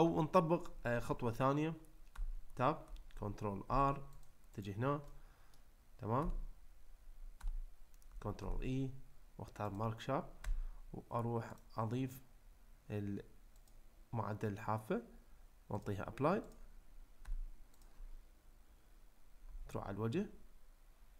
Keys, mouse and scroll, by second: 2.1 Tab, 3.7 ctrl+r, 5.1 middle click, 6.2 Tab, 7.4 Tab, 8.4 ctrl+e, 10.4 Tab, 11.6-13.7 drag, 15.8-16.6 drag, 17.2 Tab, 17.8 click, 19.4 3.